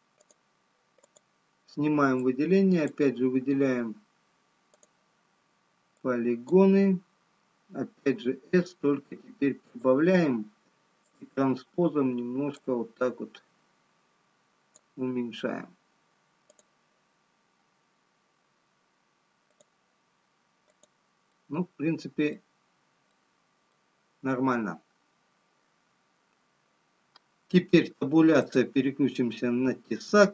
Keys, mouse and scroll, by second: 2.9 click, 6.8 click, 8.9 s, 12.8 click, 19.6 click, 20.5-21.6 scroll down 2, 21.7 click, 21.7 middle click, 22.9 scroll down 4, 25.1 middle click, 25.1-26.5 scroll down 1, 28.1 Tab, 29.7 click.